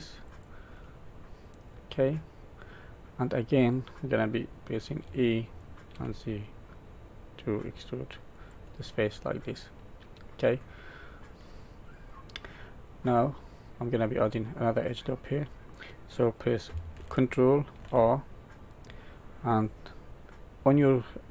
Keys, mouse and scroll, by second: 0.7 middle click, 5.0 e, 9.0 middle click, 10.8-11.2 scroll down 2, 11.2 middle click, 12.2-12.9 scroll up 2, 12.9 middle click, 17.7 ctrl+r.